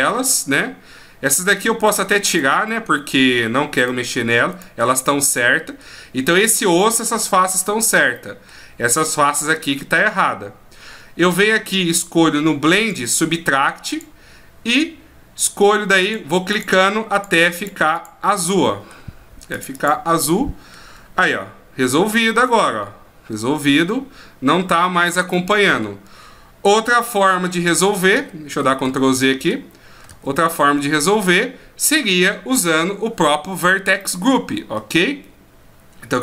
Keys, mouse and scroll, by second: 1.8 shift+right click, 2.3 shift+right click, 2.7 middle click, 3.8 shift+right click, 4.5 shift+right click, 5.0 middle click, 8.1 middle click, 10.9-11.4 scroll up 2, 12.8 click, 16.0 click, 17.6 click, 17.9 click, 18.4 middle click, 19.5 click, 19.8 click, 20.2 middle click, 21.2 r, 25.3 middle click, 27.4 ctrl+z, 27.8-29.1 ctrl+z, 34.0 middle click.